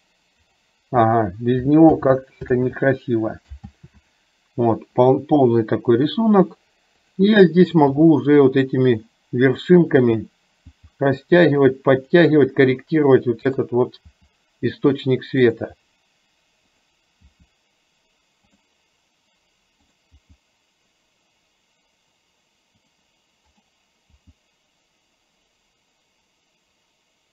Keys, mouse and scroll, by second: 1.9 ctrl+z, 2.7 ctrl+z, 3.8 ctrl+z, 8.1 g, 10.2 click, 10.8 g, 14.2 g, 16.8 click, 17.3 g, 19.9 click, 20.2 g, 23.7 click, 24.2 g.